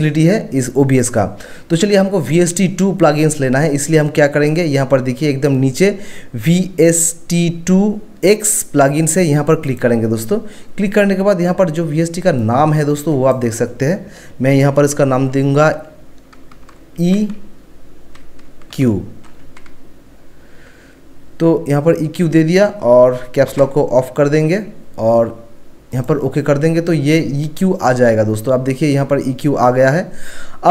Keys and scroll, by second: 16.5-17.0 typing, 18.7 q, 23.0-23.5 typing.